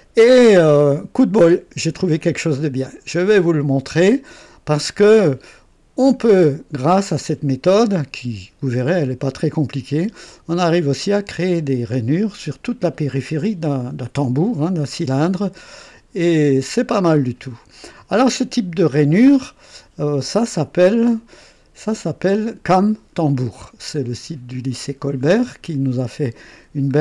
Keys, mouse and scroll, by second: 10.3 click, 11.2-14.0 drag, 14.2-16.8 drag, 17.1-17.9 drag, 21.4 click, 26.9 alt+scroll up 2.